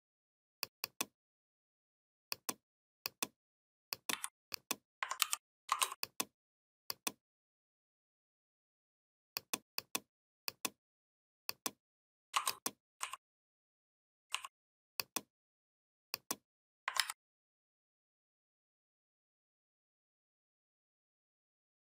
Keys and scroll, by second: 3.9 v, 5.0 ctrl+g, 16.8 ctrl+a.